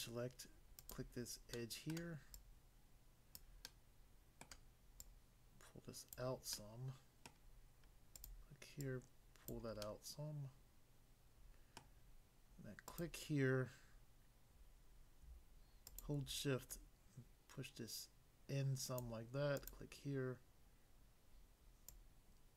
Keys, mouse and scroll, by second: 0.8 click, 1.6 middle click, 1.9 middle click, 2.3 click, 3.4 click, 3.6 middle click, 4.5 middle click, 4.9 click, 6.2 click, 6.5 middle click, 7.3 middle click, 8.2 click, 8.9 click, 9.5 click, 9.8 middle click, 11.8 middle click, 12.9 click, 15.9 shift+click, 16.7 shift+click, 19.0 click, 19.6 click, 19.7 click, 21.9 click.